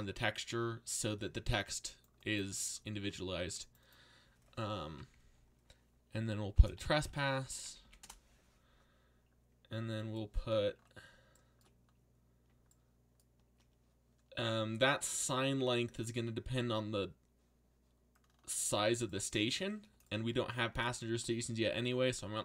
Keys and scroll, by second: 6.3-8.1 typing.